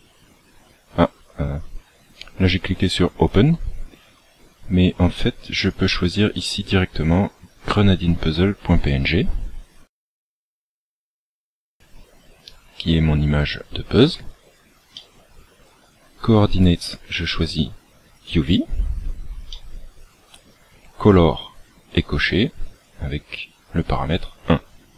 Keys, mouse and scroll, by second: 3.3 click, 16.9 click.